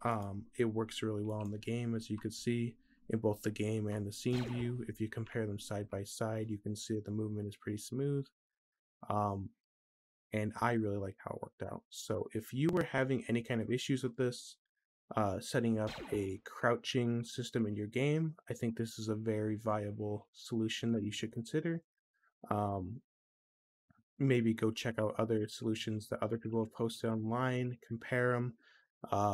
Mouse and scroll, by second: 0.0-3.2 drag, 0.0-3.2 right drag, 4.1 click, 12.7 middle click, 13.3 middle click.